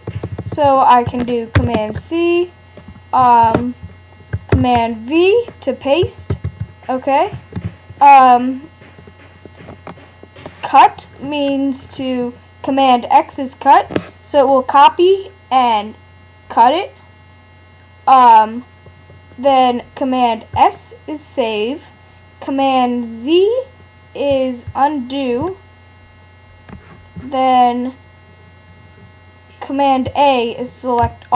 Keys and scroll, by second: 1.6 super+c, 3.4 super+n, 4.5 super+v, 6.3 super+w, 24.3 super+z, 31.0 super+a.